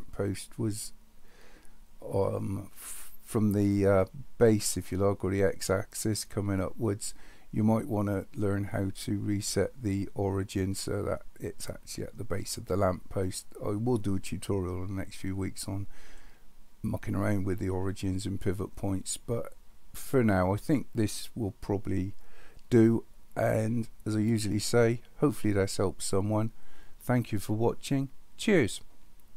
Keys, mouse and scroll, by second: 16.3 middle click, 16.5-17.7 middle drag.